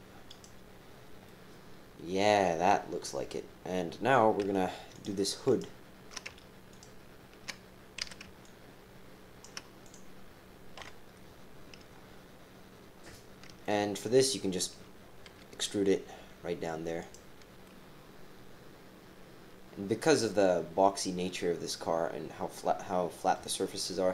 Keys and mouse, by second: 0.9 g, 1.2-3.0 drag, 5.5 alt+shift+click, 6.7 shift+click, 8.0 c, 10.8 KP_7, 13.6 shift+middle click, 15.3 e, 17.6 click, 18.5-23.3 middle drag, 23.6 middle click, 24.0-24.1 right drag.